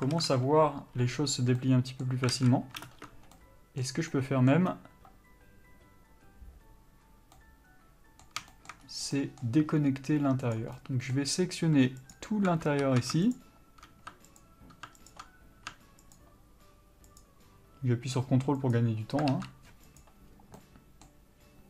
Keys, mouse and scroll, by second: 0.4 alt+a, 1.8 middle click, 2.6 alt+a, 3.1 ctrl+space, 3.1-10.7 middle drag, 9.1-9.4 scroll up 1, 9.6-10.7 scroll down 2, 10.7 click, 11.0-12.3 middle drag, 12.3 ctrl+alt+click, 13.0 ctrl+z, 13.6 shift+click, 14.6 ctrl+click, 20.2 ctrl+e, 20.8-21.6 middle drag.